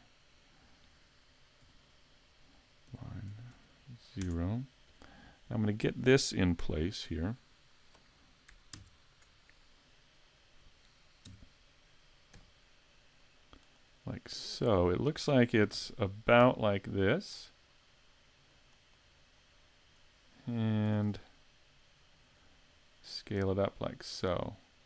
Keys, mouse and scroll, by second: 1.6 r, 6.6 KP_3, 8.8 ctrl+KP_3, 11.3 KP_5, 12.4 z, 13.2 click, 15.8 s, 17.9 click, 18.5 click, 20.9 s.